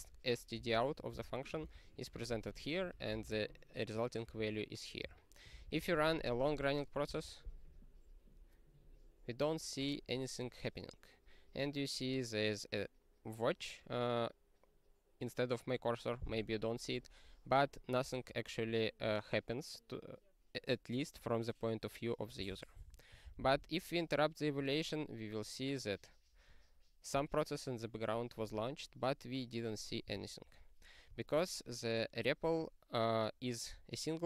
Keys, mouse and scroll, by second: 1.1 ctrl+g, 1.5 ctrl+space, 1.7 ctrl+p, 2.3 ctrl+g, 2.9 ctrl+p, 3.1 ctrl+space, 3.2 ctrl+p, 4.2 ctrl+g, 5.0 q, 5.5 ctrl+n, 5.6 ctrl+n, 5.8 ctrl+n, 5.9 ctrl+n, 6.0 ctrl+n, 6.1 ctrl+n, 6.2 ctrl+n, 6.5 ctrl+n, 6.5 ctrl+n, 6.9 ctrl+n, 22.8 super+o, 23.4 ctrl+c, 25.7 click, 26.5 click, 28.5 click, 28.7 click, 30.0 q, 30.8 click.